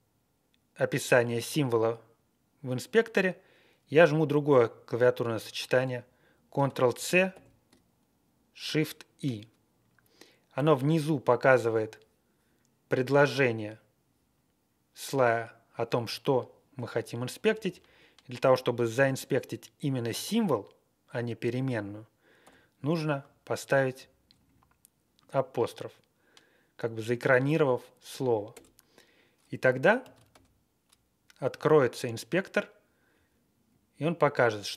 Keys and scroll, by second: 6.6 ctrl+c, 7.3 shift+i, 17.3 BackSpace, 17.5 Left, 17.7 Left, 22.4 typing, 23.9 Right, 24.2 Right, 24.4 Right, 28.5 Return, 30.0 ctrl+x, 33.1-33.4 Tab, 33.4 Right, 33.5 Right.